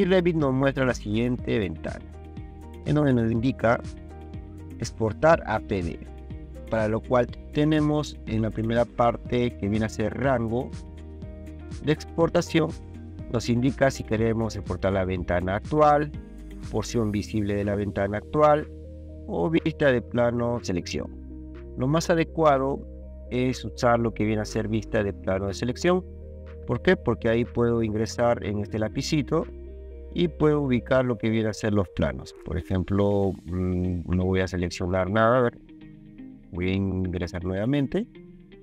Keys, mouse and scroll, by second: 0.6-2.7 drag, 29.6 click, 31.5 click, 35.5 click, 37.5 click.